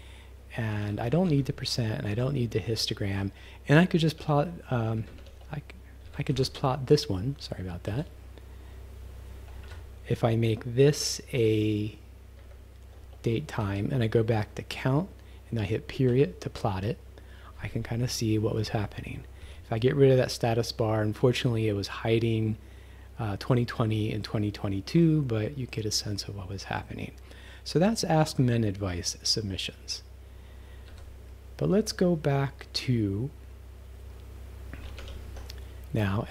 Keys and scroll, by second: 0.7 Right, 1.3 -, 4.2 s, 5.0 Up, 5.2 s, 6.1 Up, 6.3 u, 7.9 ., 9.6 Left, 12.4 shift+@, 13.6 Right, 16.1 ., 19.4 b, 30.9 q, 35.0 shift+s, 36.0 Down.